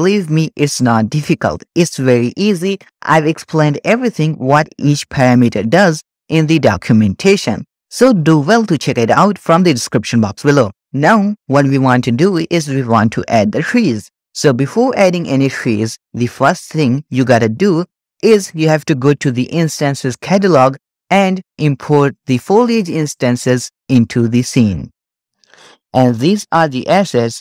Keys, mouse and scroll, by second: 0.3-2.4 scroll up 8, 20.3 click, 22.3 click, 25.6-26.1 shift+middle drag, 26.1-27.2 scroll up 1, 27.2-27.4 shift+middle drag.